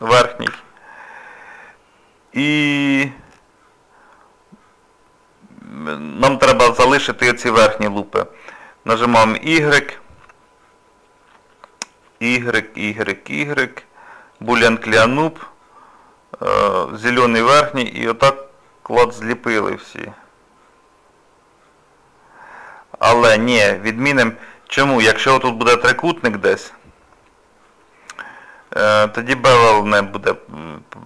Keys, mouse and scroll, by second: 0.5 1, 1.0 middle click, 2.1 scroll up 1, 2.9 middle click, 24.0 middle click, 26.2 middle click.